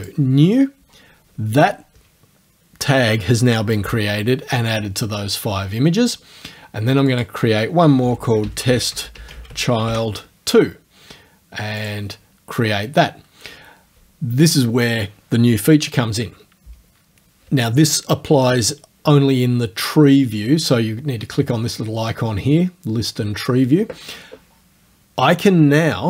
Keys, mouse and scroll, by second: 0.0 click, 7.1 click, 7.8-10.4 typing, 11.8 click.